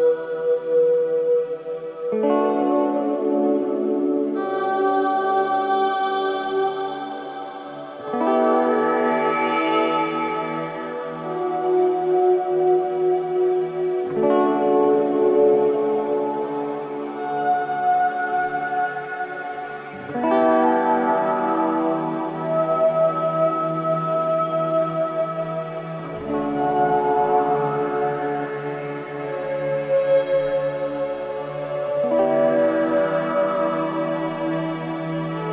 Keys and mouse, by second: 3.5 1, 4.2-7.2 right drag, 11.1 click, 23.4 shift+s, 30.5 click, 32.5 click.